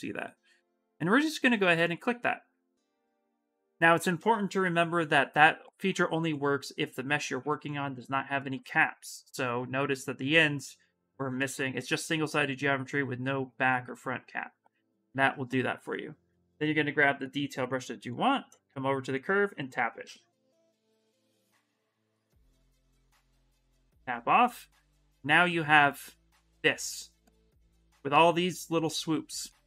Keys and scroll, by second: 3.0 s, 4.3 shift+m, 21.5 shift+f, 29.3 shift+f.